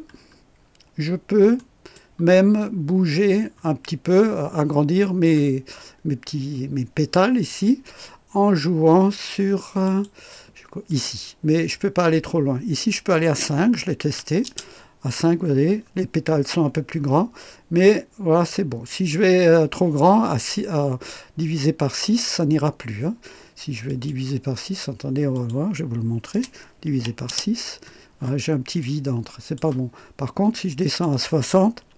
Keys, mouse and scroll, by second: 1.5 right click, 2.4-2.7 scroll up 1, 4.1-4.5 scroll up 1, 4.7-5.7 scroll down 2, 6.2 scroll down 1, 9.8 click, 10.8 click, 13.2 BackSpace, 14.0 KP_5, 14.4 Return, 16.4-17.6 scroll up 3, 18.4 scroll up 1, 23.8 click, 25.3 click, 26.3 BackSpace, 26.8 KP_6, 27.2 Return, 28.1-28.5 scroll up 1, 28.8-29.7 drag, 30.8 click, 31.8 KP_6.